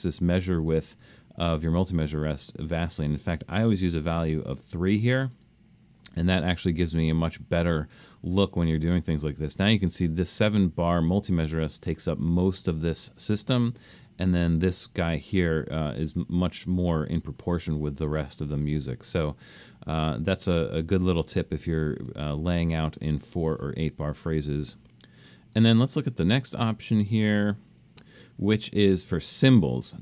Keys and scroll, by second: 4.2 3, 20.5 super+z, 21.5 super+z.